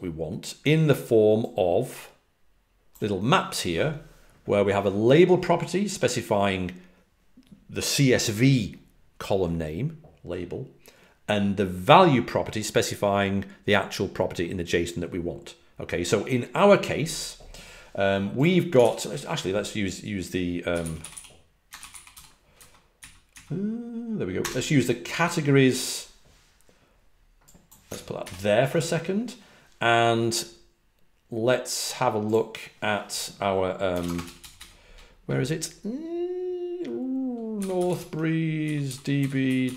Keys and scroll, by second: 18.8 super+t, 20.7-23.0 typing, 23.3 Down, 24.1-24.8 typing, 27.1 typing, 28.2 alt+super+Left, 37.5-39.7 typing.